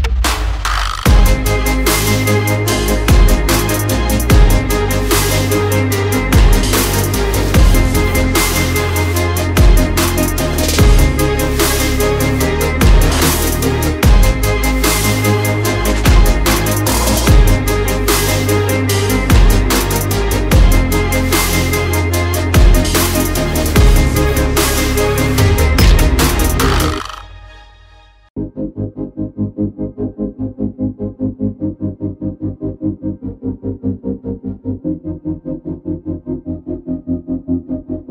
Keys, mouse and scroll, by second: 0.5 click, 0.9 alt+click, 3.1 alt+scroll up 1, 3.5-4.1 alt+scroll down 1, 4.2 alt+click, 5.5 alt+shift+click, 5.9 alt+shift+click, 6.7 alt+shift+click, 8.0 click, 11.1 alt+scroll down 1, 12.3 alt+scroll up 1, 13.1 click, 16.5 p, 17.1 click, 17.5 alt+scroll up 1, 18.1 click, 26.3 click, 26.9 alt+scroll, 27.0 alt+scroll up 1, 27.6 alt+click, 28.3 ctrl+z, 29.1 alt+click, 29.8 click, 31.3 alt+scroll down 1, 32.0 alt+scroll up 1, 32.8 click, 35.2 ctrl+z, 35.9 click, 37.3 click, 37.5 alt+scroll down 1.